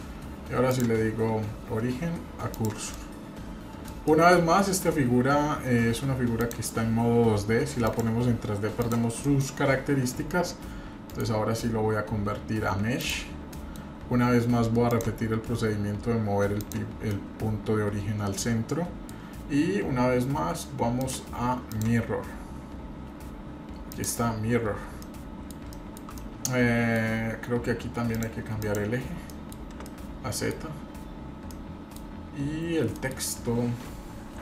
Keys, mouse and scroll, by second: 0.7-2.7 drag, 3.0-3.9 middle drag, 4.0-4.4 middle drag, 4.4-4.8 scroll up 3, 6.4 click, 7.8 click, 8.9 click, 9.2 middle click, 9.5 scroll up 3, 9.9-11.0 scroll down 1, 11.0 scroll down 1, 11.1-13.2 right drag, 13.3 scroll down 1, 13.5-13.8 middle drag, 13.9-14.4 scroll down 2, 14.9-16.8 drag, 17.1-19.1 middle drag, 21.0 click, 24.2 click, 25.0-25.5 middle drag, 25.7 shift+middle drag, 26.2-27.0 middle drag, 28.1 click, 28.6 click, 29.3 middle click, 29.6 scroll down 1, 29.8-30.5 middle drag, 31.1 scroll up 1, 31.5-31.9 middle drag, 32.3 scroll up 1, 33.0 middle click.